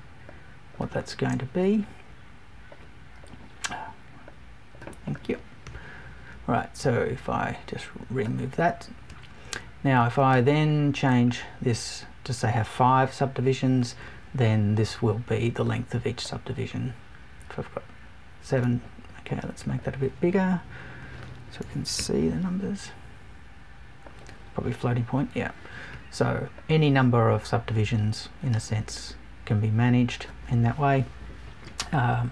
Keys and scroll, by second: 21.6 BackSpace.